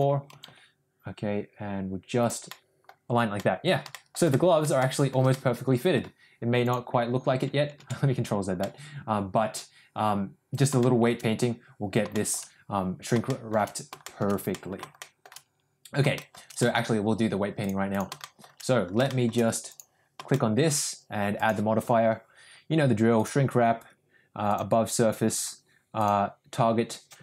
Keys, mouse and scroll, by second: 2.5 middle click, 3.3 middle click, 3.8 middle click, 4.2 middle click, 4.8 shift+middle click, 5.3 middle click, 6.7 click, 8.0 ctrl+z, 8.5-10.5 middle drag, 10.7 middle click, 12.0 shift+middle drag, 13.2 shift+middle drag, 14.0 shift+middle drag, 14.4 middle drag, 14.9 shift+middle drag, 16.1 shift+middle click, 16.5 middle drag, 17.6-18.0 drag, 18.1 shift+middle drag, 19.0 shift+middle click, 19.6 click, 20.2-20.6 shift+middle drag, 21.4-23.4 drag, 24.5-25.6 drag, 26.1-27.2 drag.